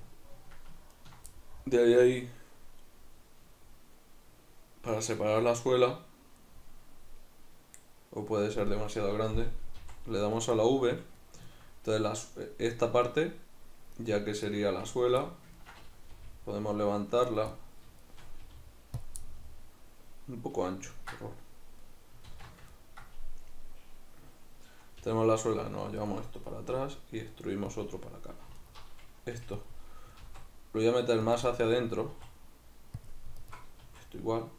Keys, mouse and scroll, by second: 0.9 ctrl+right click, 1.3-10.4 middle drag, 10.4 right click, 10.6-13.1 middle drag, 13.1 right click, 14.0 right click, 14.9 ctrl+right click, 15.3-17.3 middle drag, 16.1 g, 17.3 right click, 17.5-18.1 middle drag, 18.1 shift+right drag, 18.5 g, 19.1 click, 19.3-26.1 middle drag, 22.3 alt+q, 25.0 g, 26.1 click, 26.7 e, 27.8 click, 28.6 alt+right click, 29.3 g, 29.6 click, 30.3 alt+s, 31.4 click, 31.5-33.1 middle drag, 32.1 s, 33.1 click, 33.4 alt+right click, 33.9 middle click, 33.9 s.